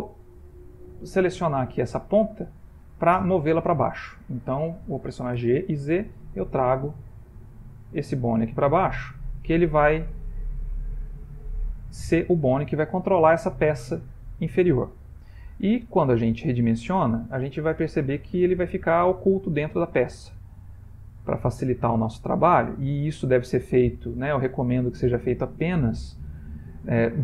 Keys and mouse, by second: 1.3 g, 5.5 g, 9.5 ctrl+middle click, 10.4 shift+middle click, 11.5 ctrl+middle click, 11.5 typing, 12.5 shift+middle click, 16.3 middle click, 19.4 middle click, 21.2 click, 24.4 click.